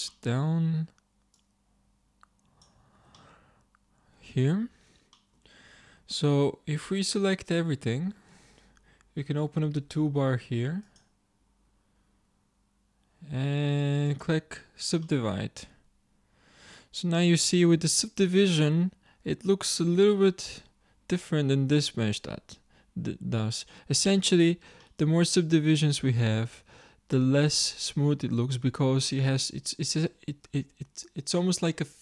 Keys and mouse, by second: 1.8-2.8 drag, 2.8 z, 3.2 middle click, 4.6 Tab, 6.1 a, 7.9 a, 12.7-14.1 middle drag, 14.1-16.2 drag, 16.8-21.3 drag, 24.9-31.5 drag.